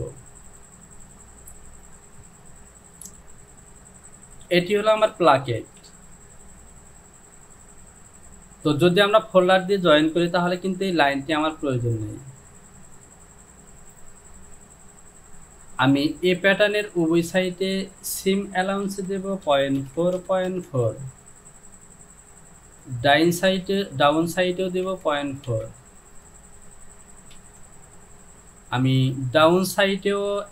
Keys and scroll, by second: 3.2 j, 5.8 Home, 19.5 KP_Decimal, 19.8 KP_4, 20.0 Down, 20.3 KP_Decimal, 20.5 KP_4, 20.8 Down, 25.5 Down, 27.4 ctrl+z.